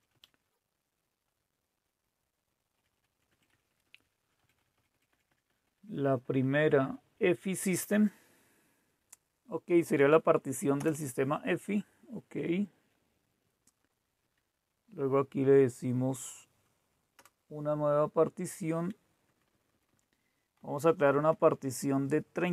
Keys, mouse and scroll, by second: 0.1 Up, 2.7 Up, 2.8-3.6 Up, 3.2 Up, 3.4 Up, 3.7 Up, 3.9 Up, 4.1 Up, 4.3 Up, 4.5 Up, 4.7 Up, 4.8 Up, 5.0 Up, 5.2 Up, 5.4 Up, 5.6 Up, 5.7 Up, 5.9 Up, 6.1 Up, 6.3 Up, 6.5 Up, 6.7 Up, 10.8 Return, 14.2 Down, 17.2 Return, 19.3 Left, 19.4 Left, 19.6 Left, 19.8 Left, 20.5-22.0 Left, 21.0 Delete, 21.2 Delete, 21.4 Delete, 21.8 Delete.